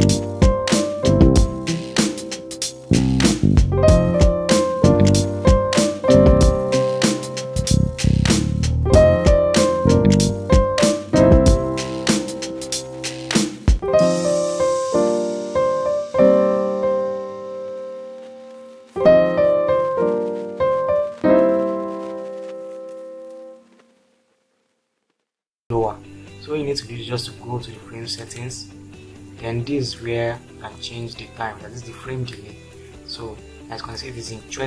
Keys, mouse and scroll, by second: 8.2 space, 16.0-17.1 drag.